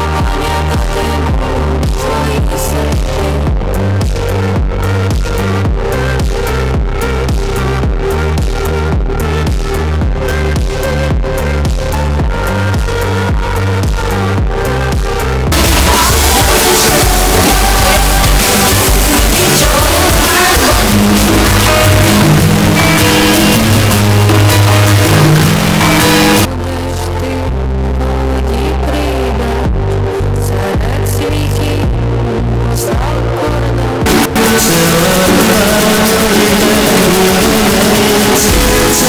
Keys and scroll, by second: 26.8 Page_Down.